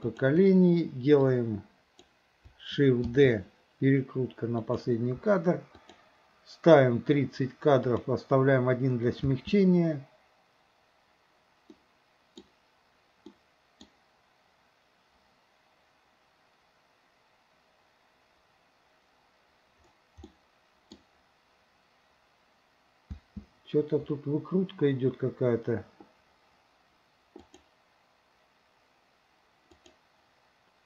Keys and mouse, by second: 0.1 shift+click, 1.2-2.1 drag, 3.1 shift+d, 5.9 click, 7.9 click, 9.3 space, 11.8-12.5 middle drag, 13.4-14.0 middle drag, 20.3-21.1 middle drag, 23.1 space, 27.5 click, 29.8 click.